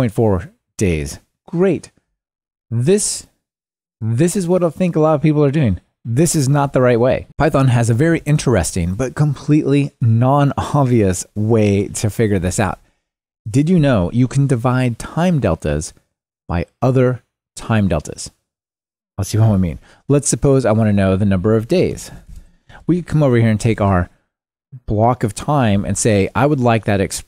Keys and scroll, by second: 13.0 Tab.